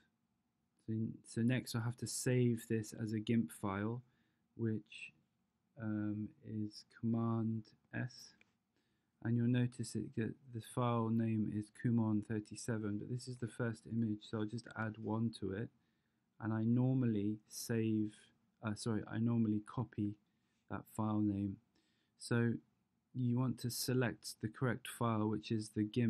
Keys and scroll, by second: 13.4 Right, 14.4 -, 14.7 1, 19.8 super+c.